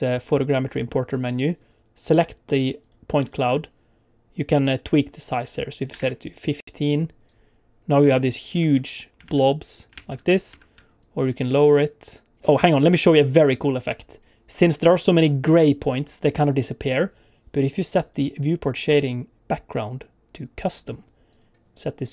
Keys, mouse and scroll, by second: 0.3 click, 2.8 click, 5.2 click, 7.3 click, 7.8 click, 8.5 space, 9.2 ctrl+space, 9.9 ctrl+space, 10.4 space, 10.9 shift+click, 13.0 click, 16.8 n, 18.0 click.